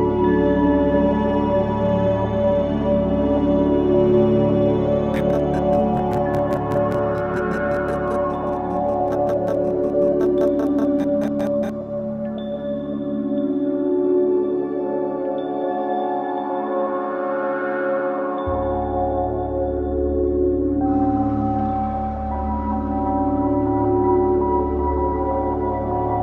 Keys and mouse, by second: 0.4 Delete, 3.1 ctrl+z, 5.1 click, 12.6 alt+shift+click, 13.3 click, 15.8 click, 17.2 click, 18.5 alt+g, 18.9 alt+r, 19.8-22.1 alt+drag, 22.5-23.5 alt+drag, 24.9 click.